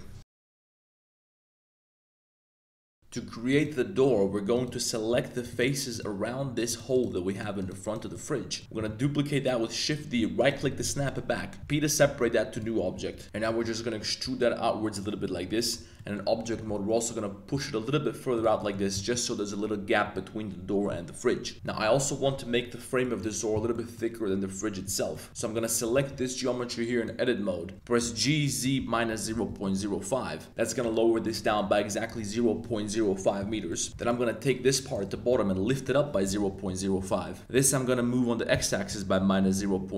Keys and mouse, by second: 3.0 2, 3.5 click, 4.1 3, 4.5 click, 5.5 shift+super+click, 5.9 shift+click, 7.3 shift+click, 7.6 shift+click, 7.8 shift+click, 8.1 middle click, 8.8 shift+d, 10.4 click, 10.9 middle click, 11.6 p, 12.9 Tab, 13.2 shift+z, 13.3 shift+middle click, 13.6 middle click, 14.2 e, 15.5 click, 15.7 Tab, 15.9 middle click, 16.5 g, 16.9 y, 18.3 shift+click, 18.6 shift+drag, 18.7 middle click, 18.9 middle click, 20.0 a, 21.5 super+z, 22.3 Tab, 23.0 drag, 23.7 drag, 24.8 Tab, 25.1 click, 25.3 a, 25.4 click, 25.9 b, 28.0-29.6 typing, 30.5 Return, 31.5 middle click, 33.7 middle click, 33.9 b, 35.3-39.8 typing, 37.0 Return.